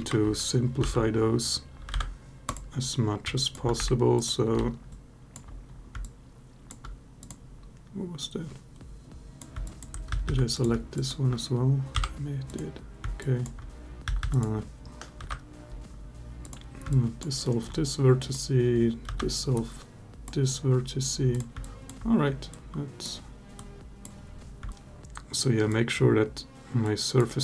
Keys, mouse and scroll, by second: 0.6 ctrl+z, 1.7 Delete, 3.1 alt+click, 3.6 1, 4.0 click, 4.4 g, 4.8 click, 4.9 ctrl+alt+z, 4.9 alt+click, 5.8 alt+click, 7.0 click, 8.0 click, 9.5 alt+click, 9.9 a, 10.0 a, 10.4 click, 11.7 m, 13.0 alt+click, 13.8 a, 14.0 a, 14.1 click, 15.0 Delete, 16.7 alt+click, 17.2 alt+middle click, 18.1 click, 18.9 Delete, 21.1 click, 21.4 alt+click, 22.4 click, 24.6 alt+click, 25.2 click, 26.6-27.0 drag.